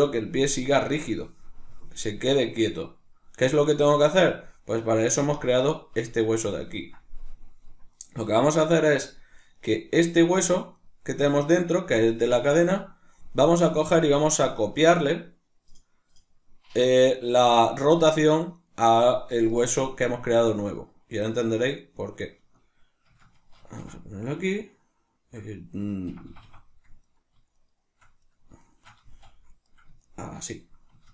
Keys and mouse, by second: 4.7 right click, 5.0 g, 5.9 right click, 6.2-9.6 ctrl+middle drag, 9.6 right click, 10.1 right click, 10.4 right click, 10.6 right click, 10.8 right click, 11.1 right click, 11.3 right click, 11.6 right click, 19.9 right click, 20.8 right click, 21.2 right click, 21.5 right click, 22.1 shift+right click, 23.6 ctrl+shift+c, 26.2 Escape, 27.0 right click, 27.6 shift+right click, 28.2 right click, 28.6 shift+right click, 29.0 z, 29.6 right click, 30.0 shift+right click.